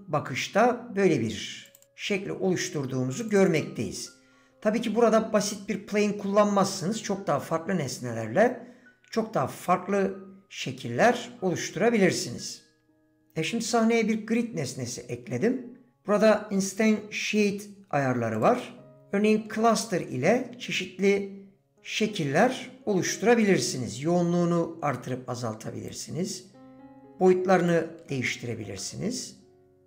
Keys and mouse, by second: 1.7 click, 3.1 click, 3.3 click, 3.5 click, 19.7-22.3 middle drag, 23.5-26.0 drag, 26.3-27.8 drag, 28.3 middle click, 29.6 click.